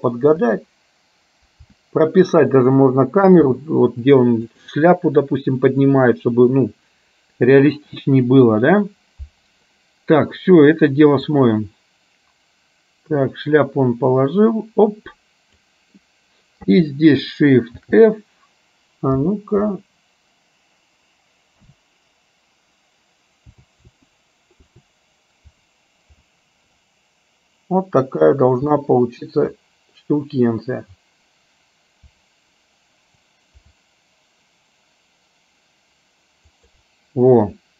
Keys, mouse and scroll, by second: 12.3-16.1 drag, 17.9 shift+f.